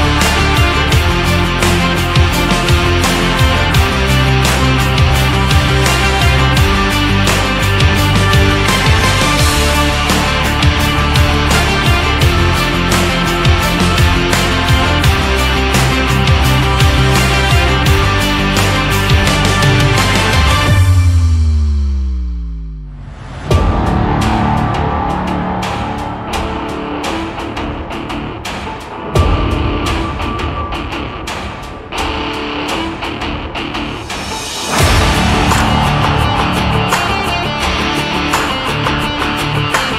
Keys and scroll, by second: 2.7 ctrl+z, 33.2 ctrl+z.